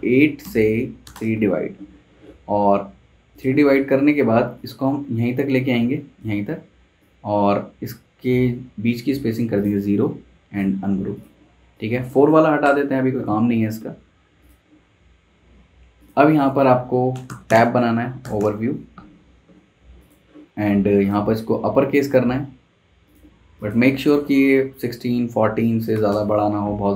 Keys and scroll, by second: 0.4 /, 1.0 3, 1.1 Return, 12.6 BackSpace, 16.8-18.8 typing, 22.0 Escape, 24.1 1, 25.9 6, 26.1 Return.